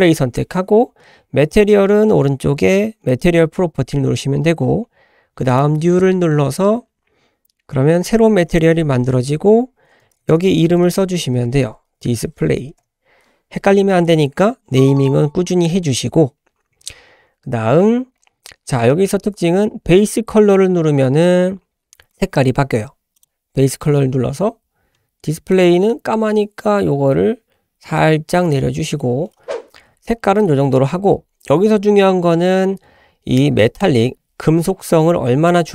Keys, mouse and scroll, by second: 3.1 click, 5.5-8.1 drag, 8.5-14.1 drag, 10.5 BackSpace, 18.3-19.4 scroll down 1, 23.2 click.